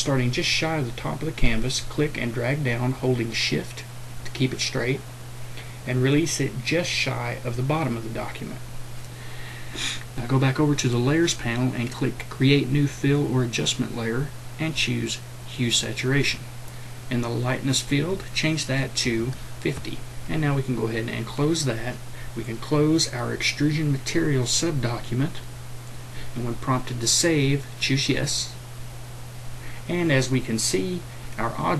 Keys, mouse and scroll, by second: 2.6-7.7 drag, 18.8 click, 19.0 KP_5, 21.2 click.